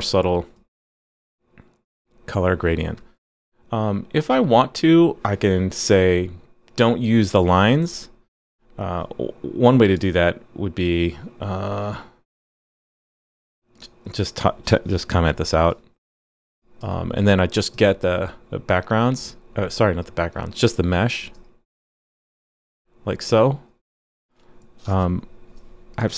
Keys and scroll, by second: 14.9 super+/, 15.3 super+s, 24.9 super+/, 25.1 super+s.